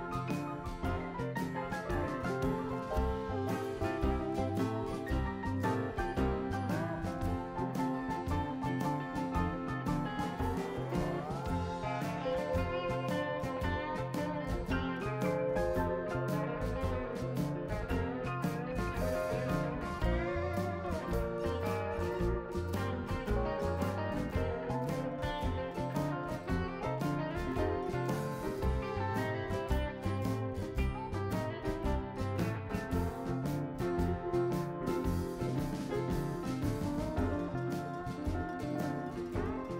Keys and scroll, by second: 0.0-1.2 typing, 3.2 Return, 3.9-7.8 typing.